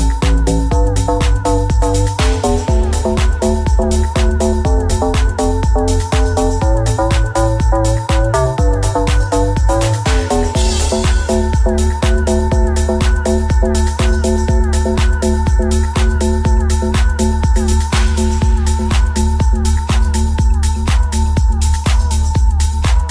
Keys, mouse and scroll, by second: 2.8 alt+s, 8.6 Tab, 8.9 s, 10.1 g, 12.1 s, 12.8 g, 13.8 alt+z, 14.3 alt+z, 14.4 Tab, 15.9 g, 22.7-23.1 middle drag.